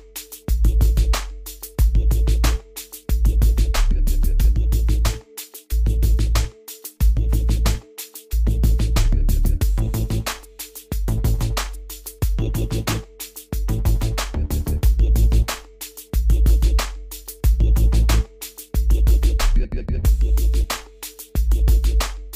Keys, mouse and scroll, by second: 0.9 middle click, 1.9 click, 3.5-3.9 scroll up 1, 3.9-4.7 scroll down 1, 4.7 click, 6.4-6.7 scroll down 1, 7.1-7.5 scroll up 1, 7.9-8.3 scroll down 1, 8.6 click, 13.3 click.